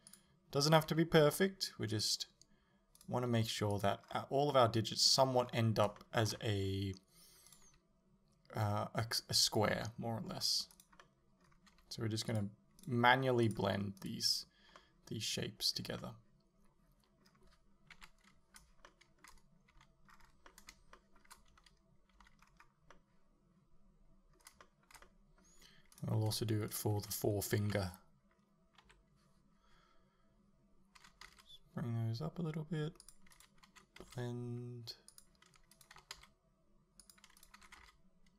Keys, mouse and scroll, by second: 0.2 click, 0.7 right click, 0.9 g, 2.0 click, 3.0 right click, 3.3 g, 3.9 click, 4.1-4.5 scroll down 1, 4.5-7.5 middle drag, 5.4-6.0 scroll up 1, 7.5 right click, 7.7 g, 9.6 click, 9.9 middle click, 10.8 right click, 11.0-12.4 middle drag, 11.7 g, 12.4 click, 12.9 right click, 13.1 g, 13.6 click, 14.0 right click, 14.8-26.0 middle drag, 18.0 KP_7, 19.8 a, 20.1-20.5 scroll down 2, 21.6 a, 22.5-23.0 scroll up 2, 26.0 right click, 26.8 shift+right click, 27.7 KP_7, 28.9 KP_3, 31.0 g, 33.1 click, 33.4 right click, 33.7 g, 35.2 click, 35.8 right click, 36.0 g, 37.1 click, 37.4 right click, 37.6 g.